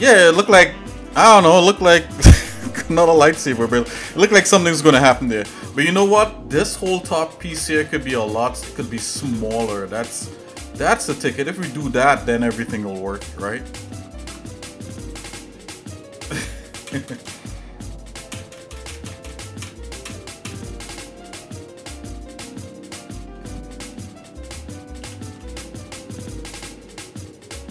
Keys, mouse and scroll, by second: 7.4 shift+middle click, 8.0 middle click, 9.9 scroll up 1, 10.9 scroll up 1, 11.3 click, 12.0 Tab, 13.2 shift+middle click, 14.2 ctrl+Tab, 15.8 click, 16.9 ctrl+KP_Add, 16.9 ctrl+KP_6, 17.1 ctrl+KP_Add, 17.4 ctrl+KP_Add, 18.4 ctrl+KP_Add, 18.6 ctrl+KP_Add, 18.8 ctrl+KP_Add, 19.0 ctrl+KP_Add, 19.2 ctrl+KP_Add, 19.4 ctrl+KP_Add, 19.7 ctrl+KP_Add, 20.2 ctrl+KP_Add, 20.6 ctrl+KP_Add, 21.7 shift+middle click, 23.2 shift+middle click, 25.0 s.